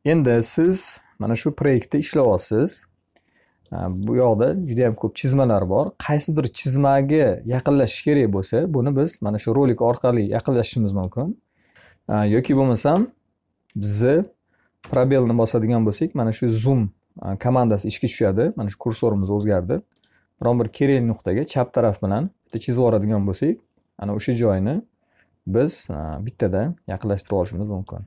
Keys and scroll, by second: 13.0 z.